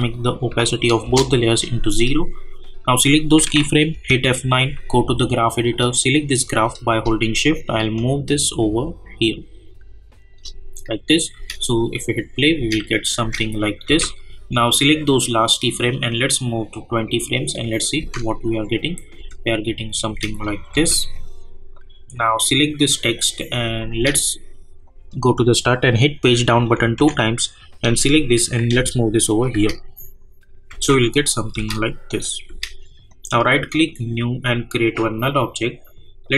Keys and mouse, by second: 1.0 Return, 2.5 click, 3.9 F9, 4.9-11.1 drag, 6.0-6.9 drag, 7.4-9.8 shift+drag, 11.3 space, 12.9 click, 13.2 space, 15.0-19.7 drag, 20.0 space, 21.1 click, 23.6 space, 24.8 click, 26.6 Page_Down, 28.7 [, 29.5 space, 31.2 click, 31.5 space, 33.1 right click, 33.8-36.3 drag.